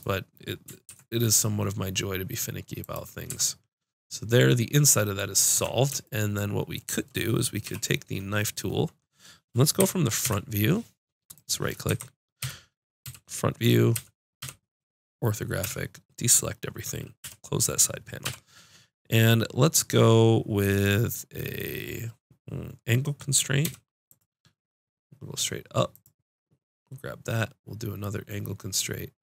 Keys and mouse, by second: 0.0 click, 0.9 ctrl+b, 2.9 click, 3.3 Tab, 5.5 Tab, 7.6 k, 11.8-14.4 typing, 15.6 a, 17.2 n, 18.2 k.